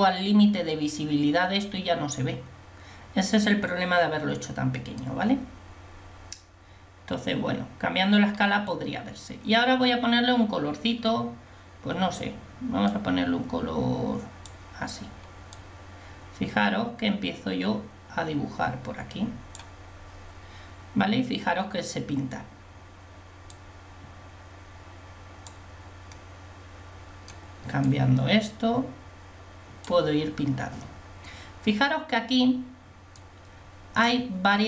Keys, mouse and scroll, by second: 12.9-18.2 drag, 23.8-25.8 drag, 26.4 middle click, 28.0-30.0 drag, 33.2-34.6 drag.